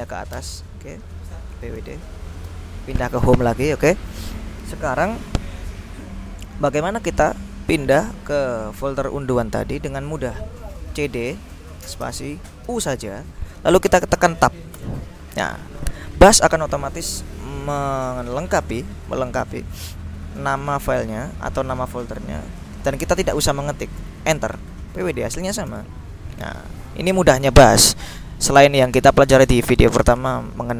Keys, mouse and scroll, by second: 0.0-2.4 typing, 2.6 Return, 10.8-12.7 typing, 14.9 Tab, 24.2 Return, 24.9-26.0 typing.